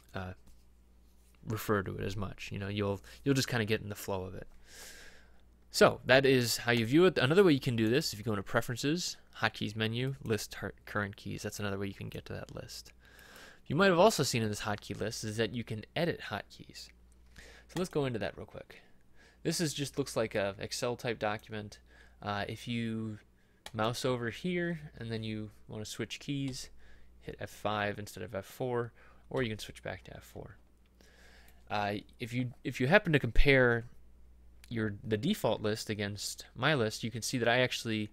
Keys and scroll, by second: 26.6 F5, 29.4 F4.